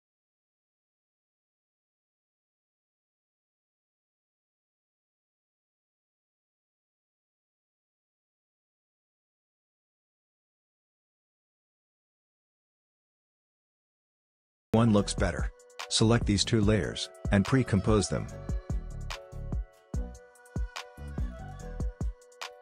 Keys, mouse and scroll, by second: 1.1 click, 1.7 space, 4.3 click, 6.4-7.0 alt+scroll up 1, 7.5 click, 9.7 alt+scroll down 1, 10.8 alt+scroll up 1, 11.7 click, 13.2 space, 15.8 click, 17.2 right click, 18.2 click, 19.3-21.0 typing, 22.0-22.6 typing.